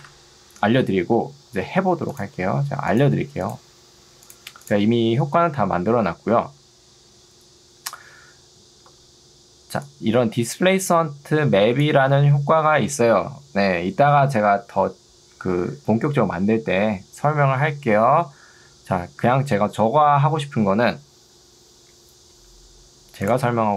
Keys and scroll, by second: 8.9 ctrl+2, 18.5 Escape.